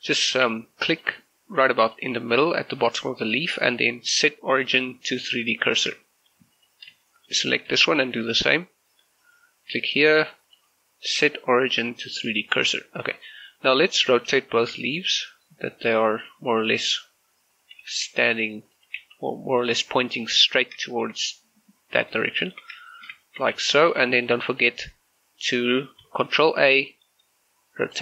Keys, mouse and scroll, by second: 0.5 z, 0.9 click, 5.8 click, 6.0 scroll down 1, 6.1 shift+middle click, 6.6 right click, 7.1 shift+middle click, 7.9 shift+middle click, 9.3 click, 12.8 scroll down 1, 12.9 shift+middle click, 13.3-13.7 scroll up 1, 13.7 scroll down 1, 14.0 shift+middle click, 14.3 r, 17.0 ctrl+click, 17.6 right click, 17.9 r, 18.7 ctrl+click, 19.1 g, 19.6 click, 20.3 r, 20.7 click, 20.9 shift+middle click, 22.5 shift+middle click, 22.9 shift+right click, 23.4 shift+middle click, 23.6 g, 23.9 click, 24.1 shift+middle click, 24.6 right click, 25.9 ctrl+a, 27.9 click.